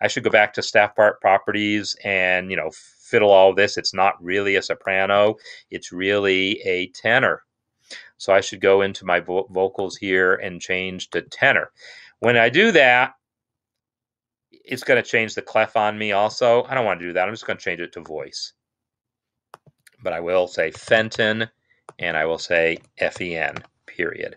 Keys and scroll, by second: 20.1 ctrl+a, 20.5-21.3 typing, 22.3 ctrl+a, 22.9-23.7 typing.